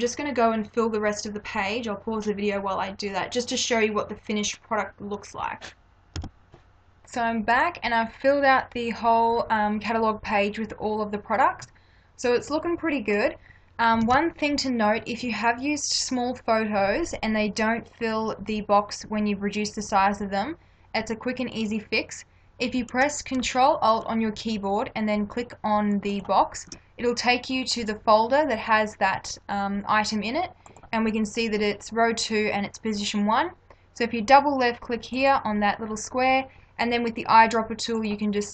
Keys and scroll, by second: 7.9 space, 14.0 ctrl+=.